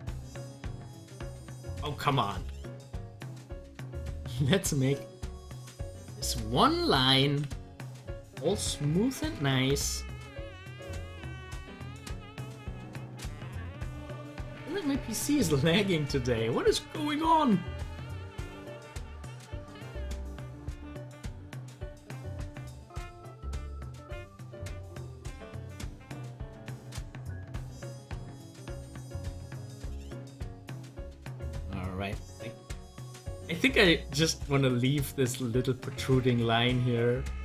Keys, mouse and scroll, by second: 2.3 ctrl+z, 7.1 ctrl+z, 9.5 z, 10.3 click, 13.1 click, 15.7-27.5 drag, 27.9-30.1 drag, 31.6 scroll down 1, 32.1 scroll up 1, 32.3 middle click, 33.3 scroll up 1, 36.9 scroll down 1.